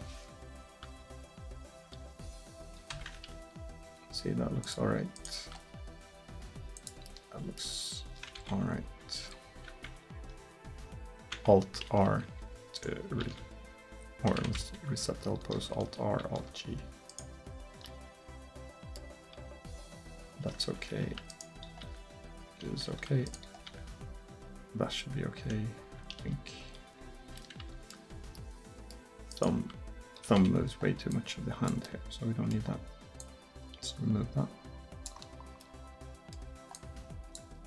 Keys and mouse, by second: 0.9 r, 3.4 r, 5.2-7.1 right drag, 5.6 r, 8.4 ctrl+z, 9.0 ctrl+z, 9.5 ctrl+z, 11.9 alt+r, 12.9 right click, 13.3 alt+g, 14.3 a, 14.5 a, 15.6 alt+r, 16.2 alt+g, 17.1-17.9 right drag, 19.2 r, 21.7 r, 23.6 r, 26.3 r, 29.6 r, 33.2-35.2 drag, 36.4-37.6 middle drag.